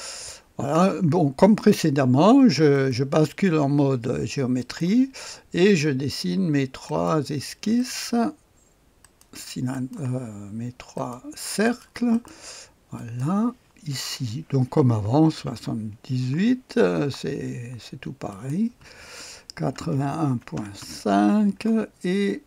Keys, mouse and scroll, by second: 2.7-3.9 drag, 3.2 middle click, 4.5 click, 4.5 middle click, 6.8 click, 6.8 middle click, 7.7 right click, 7.9 click, 9.0 right click, 9.2 click, 9.7 right click, 9.9 click, 10.9 middle click, 11.1 click, 11.6 middle click, 11.8 click, 12.1-13.2 middle drag, 13.2 click, 13.6 middle click, 14.6 r, 15.3 KP_7, 15.5 KP_8, 16.3 Return, 18.3 click, 18.8-21.3 typing.